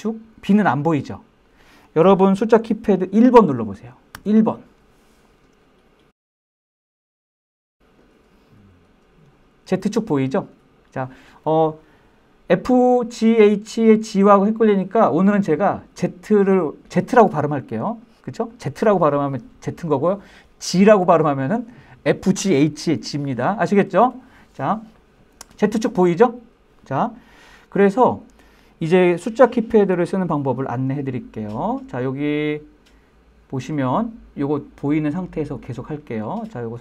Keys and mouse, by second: 5.3 click, 5.7 KP_1.